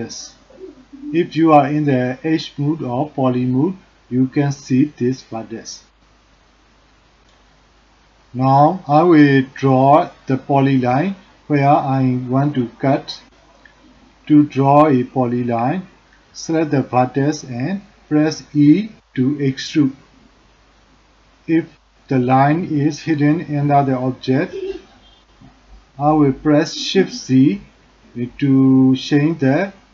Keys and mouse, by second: 2.3 click, 5.3 click, 12.3 e, 16.3 shift+z, 19.0 shift+z, 20.0 shift+z, 24.4 shift+z, 25.0 shift+z.